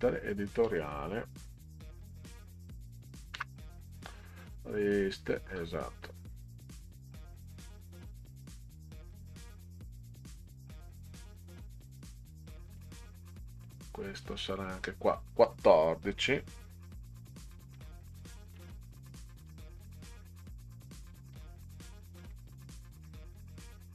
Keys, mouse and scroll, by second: 3.3 Return, 12.8 click, 14.2 click, 17.7 1, 18.1 4, 20.1 Delete, 21.3 click, 22.2 Delete.